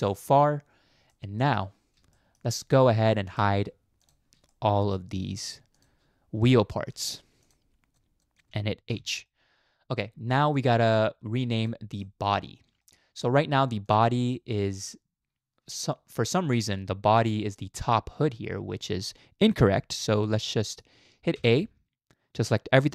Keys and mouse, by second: 0.1 click, 1.1-1.6 middle drag, 2.2 shift+middle click, 4.0 shift+click, 4.5-5.0 middle drag, 5.8 shift+click, 6.4-6.9 middle drag, 8.2 shift+drag, 8.9 h, 9.3-10.0 middle drag, 10.5 middle click, 12.0 middle click, 12.8 shift+middle drag, 13.8 click, 14.4-15.3 middle drag, 15.3 click, 15.5 shift+middle drag, 16.3 shift+middle drag, 17.2-17.6 middle drag, 20.3-20.8 middle drag, 21.4 a.